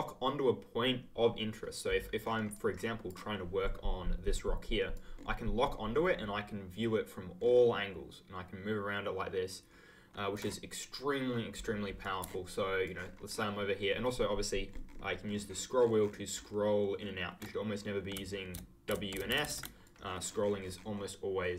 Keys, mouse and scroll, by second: 2.2-3.7 ctrl+scroll up 2, 2.5 ctrl+click, 4.9 ctrl+click, 5.1-6.1 ctrl+scroll down 1, 7.3-8.5 ctrl+scroll down 1, 12.0 click, 12.8 ctrl+click, 12.9-13.8 ctrl+scroll up 1, 13.8-14.8 ctrl+scroll down 1, 14.8-15.2 ctrl+scroll up 1, 15.2 ctrl+scroll down 1, 15.4 ctrl+scroll up 1, 15.7 ctrl+scroll down 1, 15.9-16.3 ctrl+scroll up 1, 16.3-16.7 ctrl+scroll down 1, 16.7 ctrl+scroll up 1, 18.1 w, 18.5 s, 19.8 ctrl+click, 20.0 ctrl+scroll up 1, 20.2 ctrl+scroll down 1, 20.4 ctrl+scroll up 1, 20.5 ctrl+scroll down 1, 20.7-21.5 ctrl+scroll up 1.